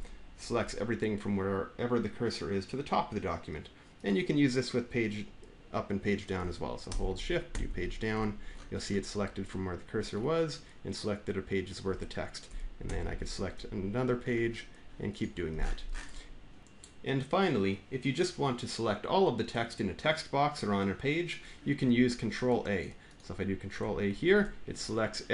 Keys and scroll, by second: 7.3 Page_Down, 12.7 Page_Down, 23.9 ctrl+a.